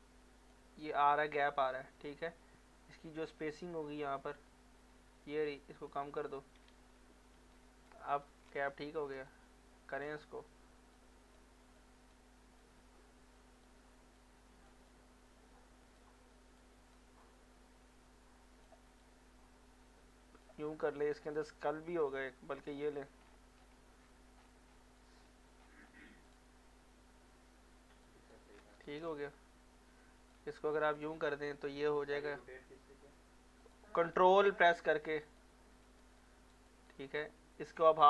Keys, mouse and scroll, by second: 1.9 scroll up 1, 5.9 click, 6.7 ctrl+z, 7.9 click, 8.0 click, 8.6 ctrl+z, 9.3-10.9 ctrl+right drag, 10.9 click, 11.7 click, 12.7-14.2 drag, 14.2 click, 14.9-16.7 drag, 16.7-20.9 drag, 20.9 scroll down 1, 21.3-22.6 scroll up 1, 22.6 click, 23.3 ctrl+scroll down 1, 24.0 scroll up 1, 25.0 alt+middle click, 25.2-25.7 alt+scroll down 2, 26.3 click, 28.0 alt+click, 28.1 alt+click, 28.7 ctrl+z, 29.0-35.8 ctrl+drag, 36.2 alt+right click, 36.7 alt+click.